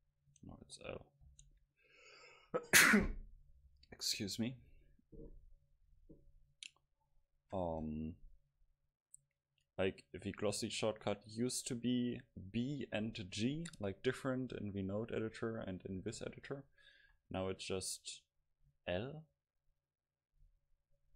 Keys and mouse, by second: 0.7-3.7 drag, 8.5-11.7 drag, 18.0-20.9 drag, 19.3-21.1 middle drag.